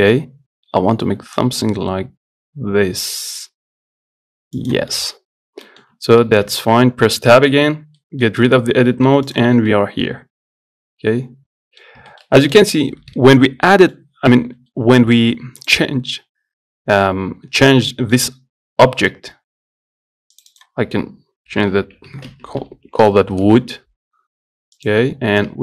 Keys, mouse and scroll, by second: 5.2 middle click, 5.4 scroll up 1, 5.9 middle click, 6.7 Tab, 7.3 Tab, 8.2 middle click, 8.6 z, 9.1 middle click, 9.5 click, 9.9-12.1 middle drag, 12.1 scroll up 1, 12.3-15.9 shift+middle drag, 15.9 click, 18.2-20.6 middle drag, 20.6 click, 20.7-23.0 drag, 23.0 o, 25.0 click.